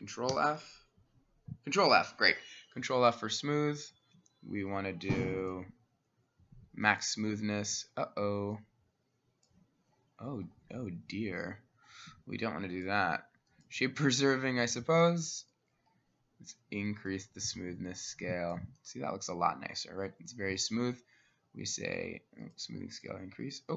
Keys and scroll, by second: 0.4 ctrl+f.